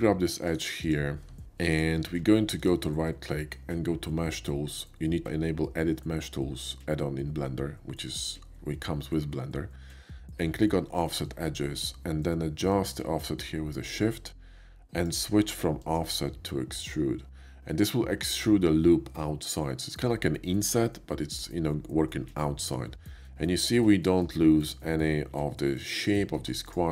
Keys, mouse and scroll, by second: 0.5 right click, 0.9 click, 1.7 ctrl+click, 2.6 ctrl+right click, 10.9 click, 12.8-15.1 shift+drag, 15.7 shift+click, 16.6 shift+click, 17.7 shift+middle click, 24.7 alt+click, 25.7 alt+click, 26.2 Tab, 26.7 click.